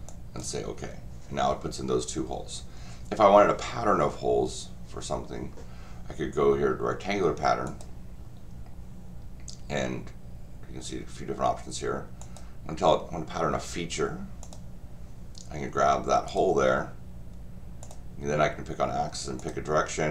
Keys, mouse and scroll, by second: 0.1 click, 7.6 click, 12.2 click, 14.4 click, 16.3 click, 17.8 click, 19.4 click.